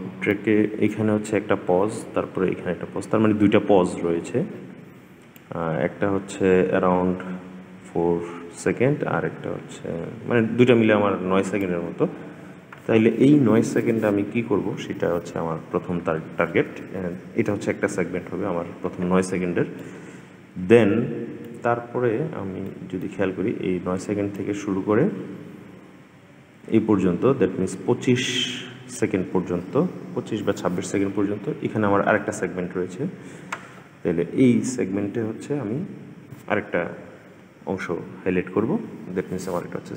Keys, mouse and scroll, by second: 5.1-8.3 drag, 19.5-21.5 middle drag, 21.5-22.5 scroll down 3, 22.5-24.1 middle drag, 24.1-27.3 drag.